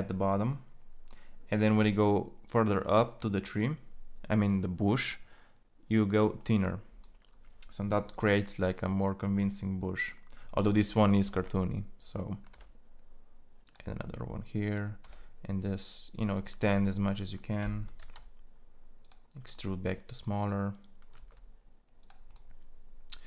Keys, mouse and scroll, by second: 12.2 e, 14.8 e, 17.7 ctrl+a, 20.9 ctrl+a.